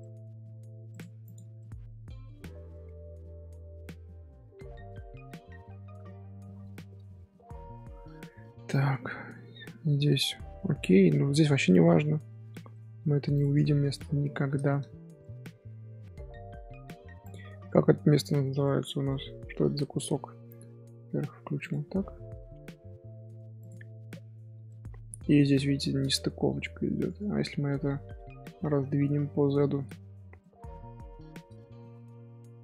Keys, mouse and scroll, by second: 0.4-0.9 scroll up 1, 0.9-1.5 right drag, 1.5-3.2 middle drag, 3.2 scroll up 1, 3.4-4.0 scroll down 1, 4.0-4.4 middle drag, 4.4 z, 4.8-5.6 middle drag, 5.6 scroll down 1, 5.7 scroll up 1, 5.8 z, 6.7-7.4 shift+middle drag, 7.4 scroll down 1, 8.3 scroll down 4, 8.7-9.1 middle drag, 9.1-9.6 scroll up 2, 9.3 middle drag, 9.6 scroll down 1, 10.7 Tab, 11.7 Tab, 12.5 alt+h, 12.7-13.2 middle drag, 13.2 scroll down 1, 13.2 scroll up 1, 13.3 click, 13.6 shift+middle drag, 13.8 z, 14.0-14.3 middle drag, 14.3 z, 14.6 shift+middle drag, 14.8 scroll down 1, 14.8 scroll up 2, 15.2-17.2 middle drag, 17.2 click, 18.6-19.7 middle drag, 19.7 scroll up 1, 20.2 scroll down 1, 21.6 click, 22.2 scroll down 2, 23.6 click, 24.3-24.6 scroll up 1, 24.6-26.0 middle drag, 26.0 scroll up 1, 26.5-27.0 middle drag, 27.0 Tab, 27.8 scroll down 1, 27.9 scroll up 1, 28.1 scroll down 1, 28.1 middle click, 29.1 scroll down 1, 29.2-29.5 scroll up 1, 29.5 shift+middle click, 30.1 scroll up 2, 30.4 middle click, 31.0-31.7 scroll up 2, 31.0 shift+middle click, 31.7 s.